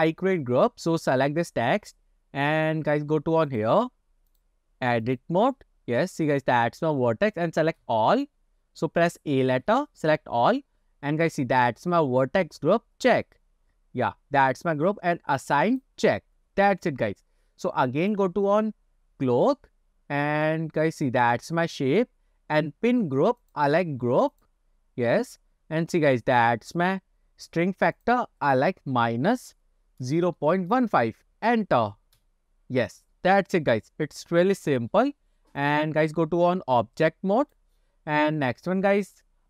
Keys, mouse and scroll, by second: 1.1 click, 3.6 click, 4.4-5.4 drag, 5.9 scroll down 1, 6.3 scroll up 1, 6.9-7.6 scroll up 2, 7.9 a, 8.5-9.7 scroll down 2, 9.7 a, 13.2 click, 15.7 click, 18.1 click, 19.3-21.2 scroll down 10, 23.5-24.5 drag, 28.1-32.4 drag, 35.7-38.0 drag, 38.5-38.8 scroll down 2.